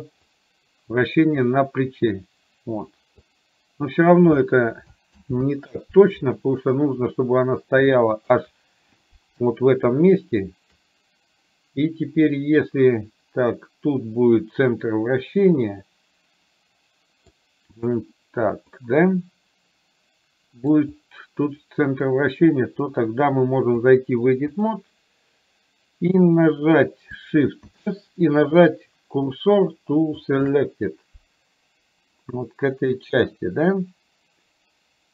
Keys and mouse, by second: 0.4-4.2 drag, 5.2 ctrl+z, 8.1-8.4 shift+middle drag, 10.2 shift+right click, 12.3-17.4 middle drag, 18.9-20.7 middle drag, 23.8-24.8 drag, 27.7 shift+s.